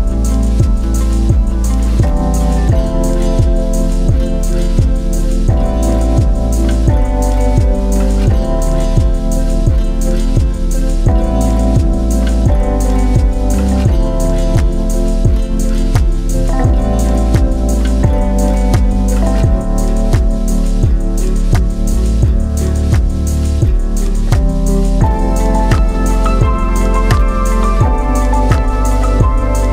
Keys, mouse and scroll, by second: 6.8-9.9 drag, 15.0 right click, 15.7 click, 19.4-21.7 drag, 20.8 BackSpace, 24.8-26.3 middle drag, 26.3-29.7 drag.